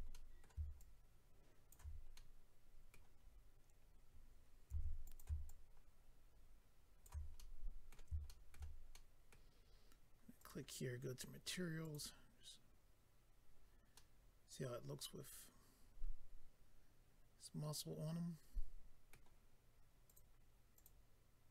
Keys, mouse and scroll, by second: 0.1 middle click, 0.7 ctrl+click, 2.1 middle click, 3.2 scroll down 2, 4.7 f, 5.0 click, 5.2 click, 5.4 shift+click, 7.3 middle click, 8.3 shift+middle click, 8.9 middle click, 10.4 click, 10.5 click, 11.8 click, 11.9 click, 13.9 middle click, 20.0 click, 20.1 click, 20.7 click, 20.8 click.